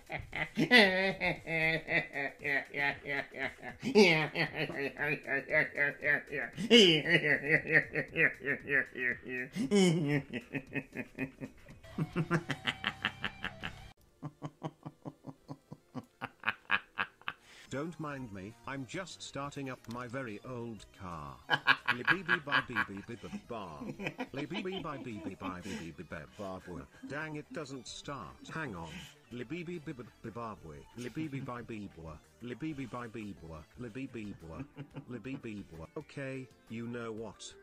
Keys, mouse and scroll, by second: 11.8 space, 13.6 space.